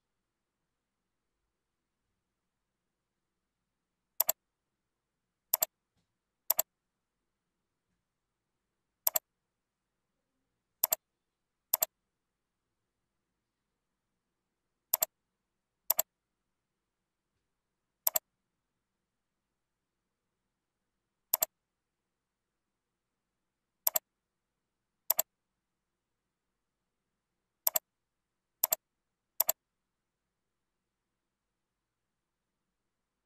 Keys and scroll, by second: 26.7 ctrl+z.